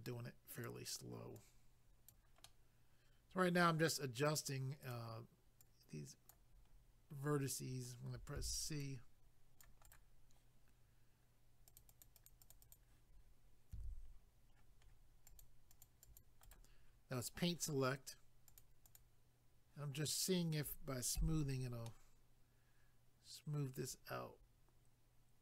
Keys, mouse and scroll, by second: 0.1 click, 0.6 click, 0.6 click, 1.3 click, 2.4 middle click, 4.8 click, 4.9 click, 5.6 click, 6.7 scroll up 1, 8.4 c, 8.8 click, 9.9 right click, 9.9 right click, 11.7 click, 11.8 click, 11.9 click, 12.0 click, 12.2 click, 12.3 double click, 12.4 click, 12.5 click, 12.6 click, 12.8 double click, 13.7 c, 14.1-14.6 scroll down 1, 14.6 scroll down 1, 15.3 click, 15.4 click, 15.7 click, 15.8 double click, 16.0 click, 16.2 click, 16.4 right click, 16.5 double right click, 16.8 scroll down 1, 18.5 click, 18.6 click, 18.8 click, 19.0 double click, 21.2 a, 21.4 scroll down 1, 21.9 middle click.